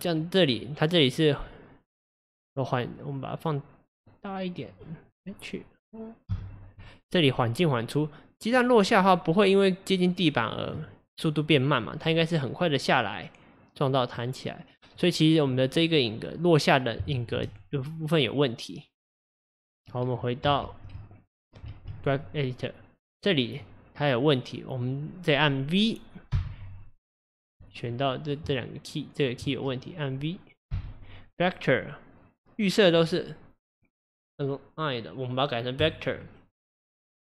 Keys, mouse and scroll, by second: 4.2-6.4 drag, 6.5 click, 8.9 drag, 9.1-9.5 drag, 10.3 drag, 10.7 click, 12.0 drag, 12.4-12.9 drag, 13.0-27.8 drag, 27.9-35.9 drag.